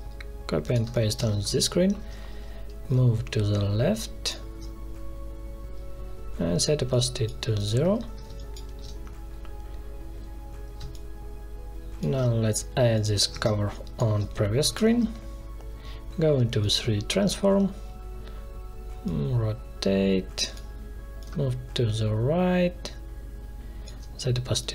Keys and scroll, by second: 0.8 space, 1.2 ctrl+v, 8.2 space, 10.7 space, 13.1 ctrl+c, 13.4 space, 14.8 ctrl+v.